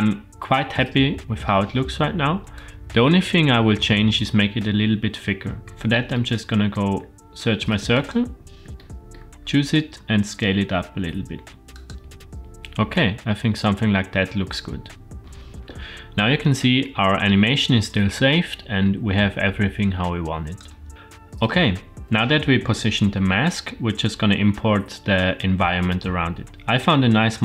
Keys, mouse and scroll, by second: 2.5 click, 4.7-5.4 scroll down 2, 5.4 scroll down 4, 6.1-6.7 shift+middle drag, 7.9 click, 8.8-9.1 shift+middle drag, 9.4-10.0 scroll up 4, 10.0 s, 12.9-15.2 middle drag, 15.2-16.2 scroll down 2, 16.2-20.7 drag.